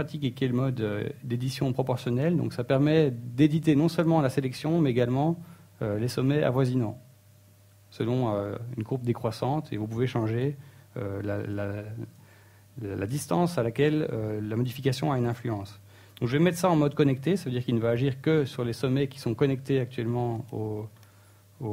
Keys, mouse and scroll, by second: 14.0 click, 19.5 shift+middle click, 19.9-21.0 scroll up 2, 21.0 scroll down 1.